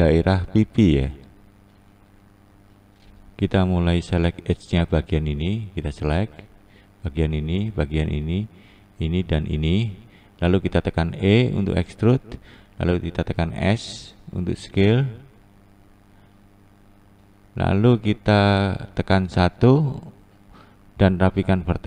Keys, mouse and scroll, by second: 4.3 2, 5.4 shift+click, 6.5 shift+click, 7.4 shift+click, 8.6 shift+click, 9.5 shift+click, 10.9 e, 14.0 s, 19.1 1, 20.1 click, 20.8 click.